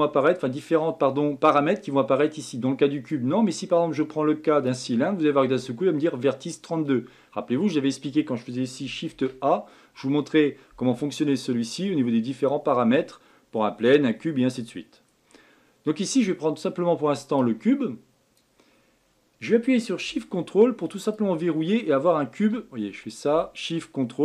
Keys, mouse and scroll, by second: 3.1-6.1 drag, 9.1 shift+a, 17.4-20.5 drag, 21.1 ctrl+shift+click.